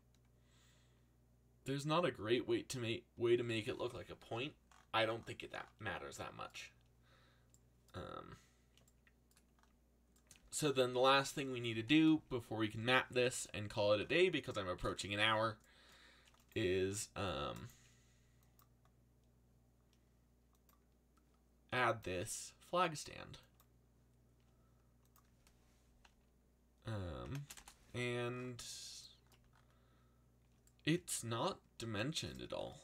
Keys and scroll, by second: 4.3 a, 12.7 z, 16.7 c, 26.9-27.9 typing.